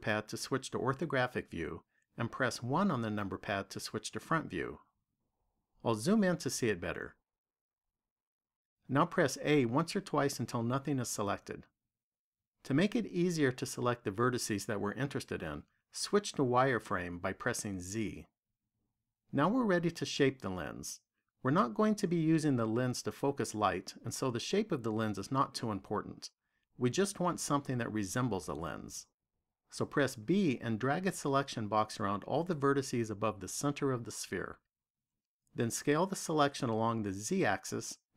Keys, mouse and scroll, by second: 2.4 KP_1, 6.2-9.3 scroll up 10, 10.0 a, 17.8 z, 30.3 b.